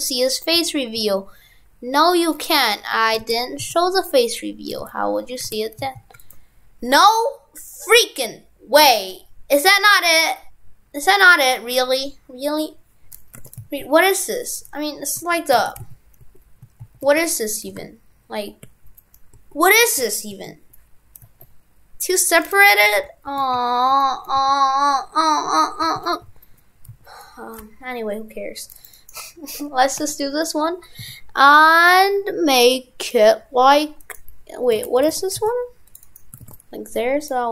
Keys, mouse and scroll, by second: 3.2 shift+f, 4.8 shift+f, 5.4 shift+f, 13.4 shift+f, 29.0 right click, 34.7 shift+f, 36.1 right click, 36.4 shift+f.